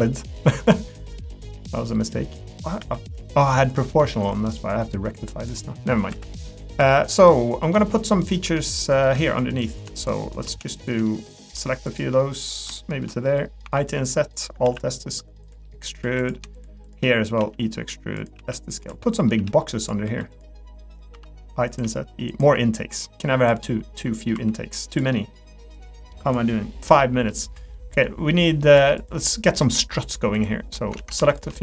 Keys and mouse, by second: 0.4 click, 1.2 middle click, 2.4 middle click, 3.7-5.5 drag, 5.8 middle click, 6.1 3, 6.3 middle click, 6.9 middle click, 7.7 middle click, 8.8 middle click, 9.6 click, 10.0 shift+click, 11.1 middle click, 11.9 shift+click, 14.6 alt+s, 15.6 middle click, 16.0 3, 16.2 click, 17.4 e, 18.3 s, 19.0 middle click, 19.3 g, 20.0 3, 20.3 click, 21.1 i, 21.8 e, 23.0 click, 23.6 middle click, 24.3 2, 25.1 middle click, 25.8 click, 26.7 middle click, 27.3 middle click, 27.7 middle click, 28.3 middle click, 28.7 3, 29.0 click, 29.2 middle click, 29.9 shift+click, 30.3 shift+click, 31.0 ctrl+z, 31.3 shift+click, 31.5 middle click.